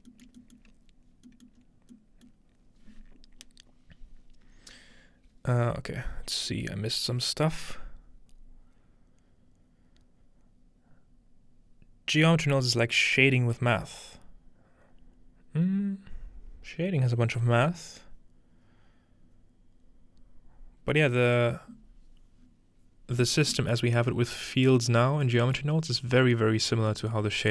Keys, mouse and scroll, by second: 0.0 shift+middle click, 0.7-2.0 shift+middle drag, 1.6-3.6 scroll up 1, 22.4-23.0 scroll down 2, 23.7-25.2 middle drag, 25.4 middle click, 26.1-27.5 scroll up 3, 26.2 middle click.